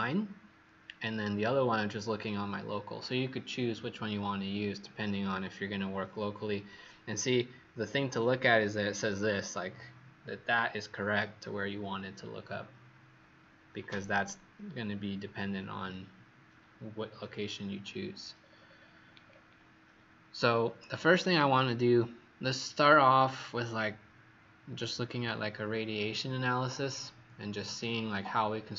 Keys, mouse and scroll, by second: 5.1-5.8 scroll up 3, 5.8-7.8 scroll up 4, 7.8 scroll down 2, 18.4-20.0 scroll down 6, 20.0-21.2 scroll down 1, 21.2 right click.